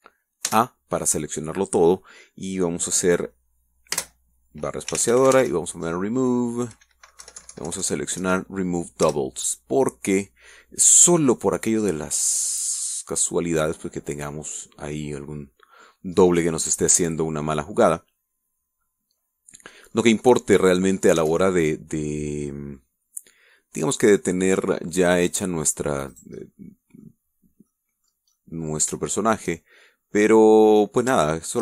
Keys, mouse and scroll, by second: 0.5 a, 1.3 a, 4.8-6.2 typing, 8.1 Down, 9.9 Return, 13.4-16.9 middle drag, 17.0-17.4 scroll up 1, 17.4-17.8 scroll down 1, 17.8 Tab, 18.4-20.9 middle drag, 21.0 scroll down 1, 21.2-21.8 middle drag, 21.9 scroll up 1, 22.1 Tab, 22.3-23.8 middle drag, 25.9 click, 27.0 right click, 27.3 middle click, 28.6 middle click, 29.2 middle click, 30.4-31.6 shift+middle drag.